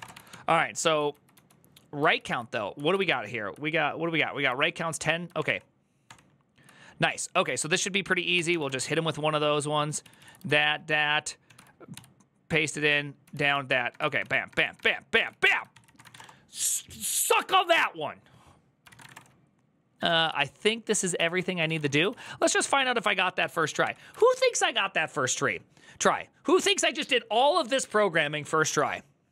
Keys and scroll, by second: 0.0-1.6 typing, 1.8 ctrl+u, 2.1 ctrl+u, 7.9-11.7 typing, 9.8 ctrl+a, 10.0 ctrl+a, 12.8-16.4 typing, 18.7 ctrl+c, 18.8 typing, 18.9 Return, 19.9 typing, 20.0 Return, 20.0 ctrl+u, 20.9 ctrl+u, 21.4-23.7 typing, 21.6 Return, 21.8 ctrl+a, 22.4 ctrl+c.